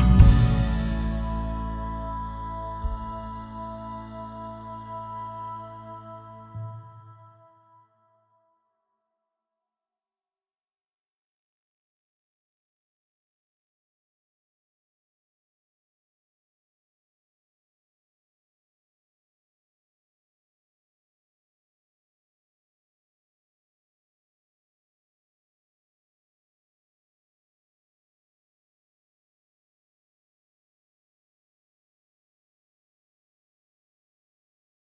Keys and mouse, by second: 3.2 g, 3.8 x, 5.3 click, 6.1 click, 6.5 g, 6.8 x, 8.6 click, 10.8 Tab, 14.8-16.6 right drag, 17.6 ctrl+2, 18.3-19.5 drag, 21.6 click, 22.8-25.2 typing, 24.3 KP_Enter, 26.6 click, 27.4 KP_1, 29.7 s, 31.4 click, 31.9 r, 33.9 click.